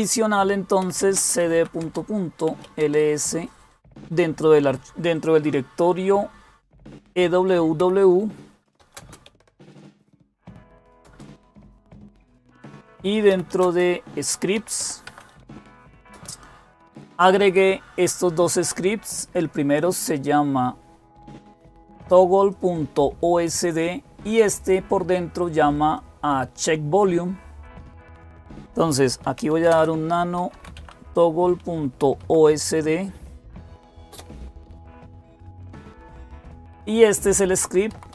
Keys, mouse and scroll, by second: 0.4-3.0 typing, 7.6-11.2 typing, 12.9-16.3 typing, 22.3-23.7 drag, 24.4 click, 25.8-29.1 drag, 28.8-30.8 typing, 32.0 typing, 33.9 typing, 37.4 Page_Down, 37.7 Down, 37.9 Down.